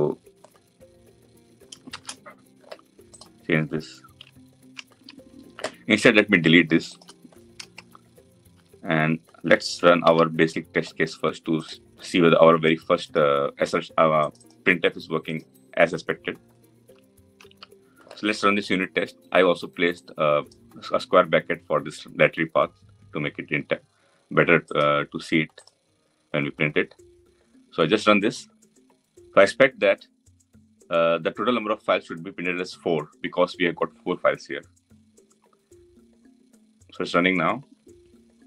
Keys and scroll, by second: 1.6 ctrl+shift+/, 7.4 Delete, 9.7 Delete, 9.8 ctrl+alt+l.